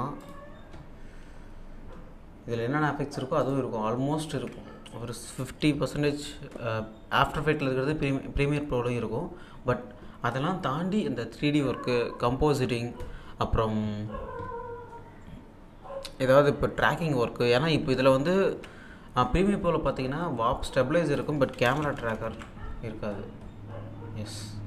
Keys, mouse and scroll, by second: 0.2 click, 3.5 click, 4.5 alt+Tab, 9.6 scroll down 1, 17.9 alt+Num_Lock, 17.9 scroll down 1, 18.1 alt+Tab, 21.1 click, 21.7-23.0 typing, 23.1-24.3 scroll down 1.